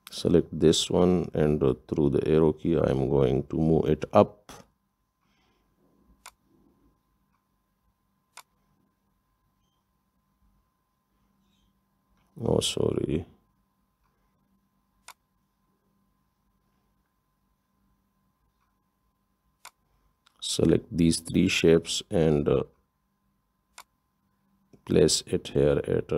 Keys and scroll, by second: 2.1 Up, 2.6 Up, 11.2 Right, 12.3 Up.